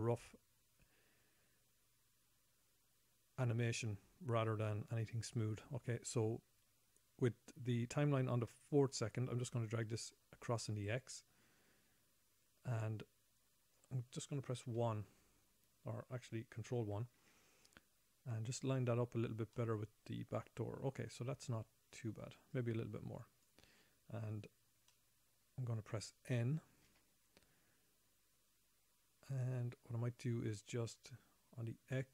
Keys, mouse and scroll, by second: 10.2 click, 15.1 KP_1, 17.6 ctrl+KP_1, 17.8 ctrl+KP_1, 19.2-19.7 scroll up 2, 20.0 shift+middle click, 22.9 click, 25.3 middle click, 27.2 n, 29.3-30.3 scroll up 20.